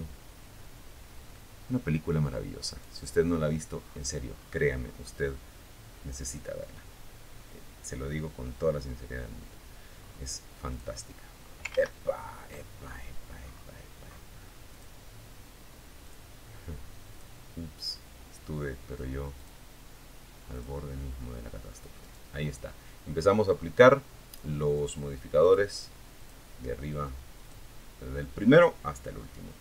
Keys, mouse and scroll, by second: 0.9 right click, 2.0-3.3 scroll down 4, 8.2 scroll down 2, 8.9 click, 9.9 ctrl+z, 11.0-12.5 ctrl+scroll up 7, 12.9 click, 14.2 click, 17.6 click, 18.7 click, 20.2 right click, 21.6-22.0 scroll up 1, 22.9 click, 23.6 click, 24.4 click, 25.6 click, 27.6 scroll down 1, 28.1 scroll up 1, 29.4 click.